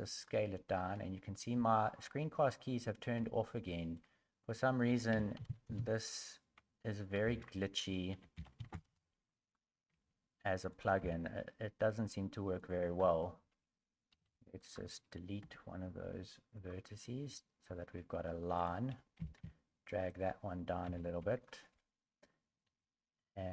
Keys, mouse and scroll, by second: 2.4 shift+middle click, 3.7 shift+middle click, 4.9 r, 14.6 Tab, 14.6 right click, 14.6 1, 15.4 Delete, 18.6 right click, 19.2 g, 20.8 2, 21.3 right click, 22.6 a.